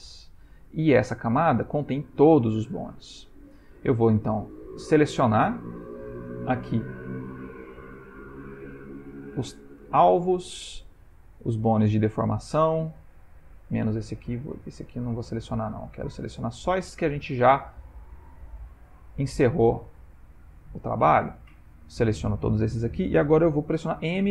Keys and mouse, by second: 7.7 click, 10.3 shift+click, 13.3 shift+click, 14.6 shift+click, 15.8 click, 17.2 click, 18.7 shift+click, 19.0 shift+click, 21.0 shift+click.